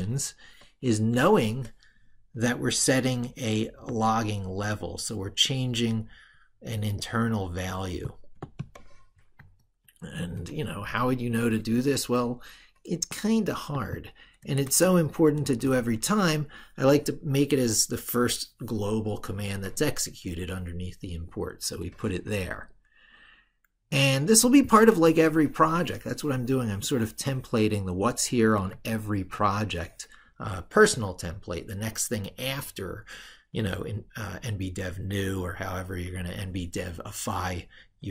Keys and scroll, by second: 9.3 ctrl+super+Right, 15.5 ctrl+v, 28.5 ctrl+super+Left.